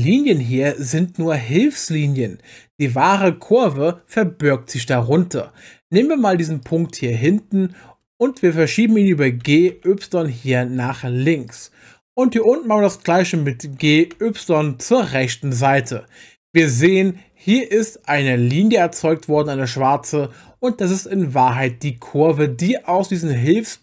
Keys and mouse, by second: 9.4 g, 9.7 y, 11.5 click, 13.3 click, 14.1 y, 16.7 click.